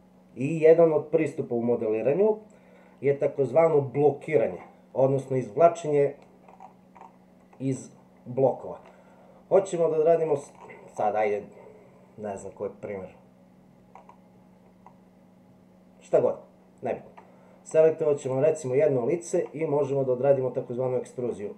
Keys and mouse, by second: 7.6-8.9 middle drag, 18.3 click, 20.1-21.3 middle drag.